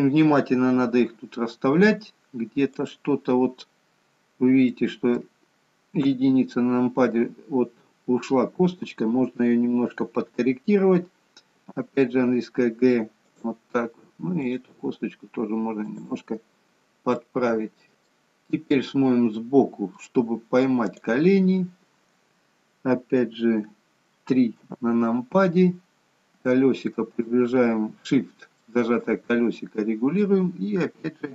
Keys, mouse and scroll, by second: 2.9 click, 3.5-4.8 scroll up 5, 4.8 middle click, 6.1 KP_1, 14.5 click, 15.0 g, 16.8-17.3 scroll down 1, 17.3 middle click, 18.4-19.5 scroll down 4, 19.5 middle click, 21.0 click, 24.7 KP_3, 25.8-27.0 scroll up 5, 27.0 scroll up 1, 27.3 shift+middle click.